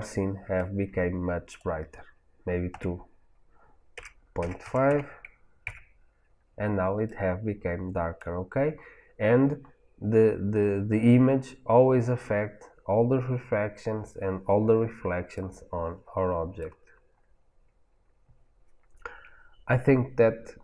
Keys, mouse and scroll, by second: 1.4-7.0 drag, 5.8 KP_Enter, 7.0-16.6 middle drag, 9.4-12.4 scroll down 2, 12.4-13.5 scroll down 1, 16.9 middle click, 17.5-18.3 scroll up 2, 17.9-18.3 middle drag.